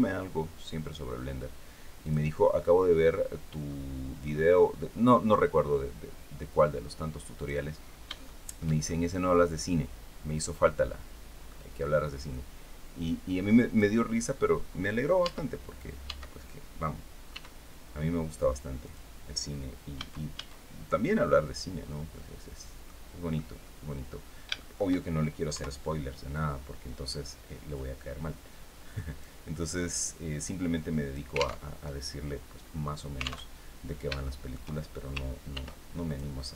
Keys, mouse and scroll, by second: 1.7 click, 2.2-4.1 drag, 5.0-7.3 drag, 7.4-7.8 scroll up 1, 7.9 shift+middle click, 8.5-11.3 shift+middle drag, 12.0-13.6 drag, 14.3 scroll up 1, 14.9 Tab, 15.7 Tab, 17.0 e, 18.5 click, 19.6 a, 20.5 scroll down 1, 20.8-22.7 middle drag, 23.0 middle click, 24.2 shift+middle click, 25.2 KP_3, 27.4-29.1 drag, 29.6-31.0 drag, 31.3 alt+Tab, 33.2 alt+Tab, 33.5 scroll up 3, 33.9 shift+middle click, 35.2 ctrl+r, 35.7 ctrl+click.